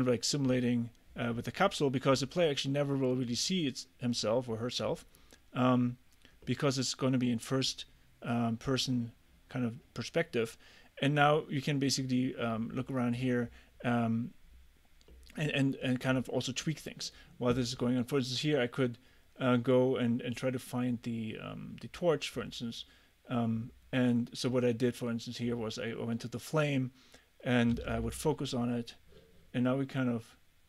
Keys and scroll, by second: 27.8 f.